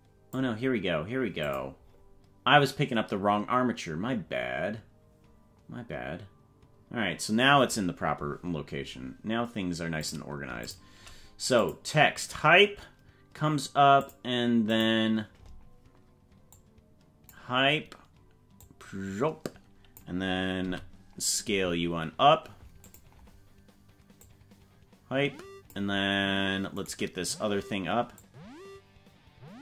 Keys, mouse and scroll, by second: 1.4 click, 1.8-2.3 scroll down 5, 8.8 scroll up 2, 10.0 click, 10.6 shift+click, 11.6 click, 14.1 click, 14.7 click, 16.7 click, 18.7-20.1 drag, 20.6 s, 24.2-25.8 drag, 26.9 right click, 28.2-29.6 drag.